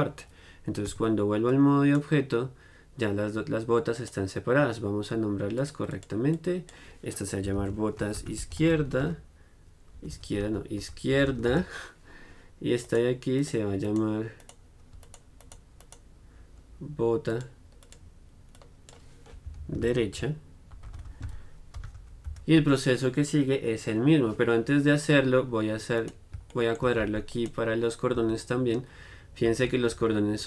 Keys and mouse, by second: 1.0 Tab, 1.6-4.1 right drag, 5.7-7.6 drag, 10.3 BackSpace, 13.0 click, 13.5-29.6 right drag, 17.5-26.1 drag, 26.8-29.6 drag, 28.3 z, 29.6 middle click, 29.6 z, 30.1 g.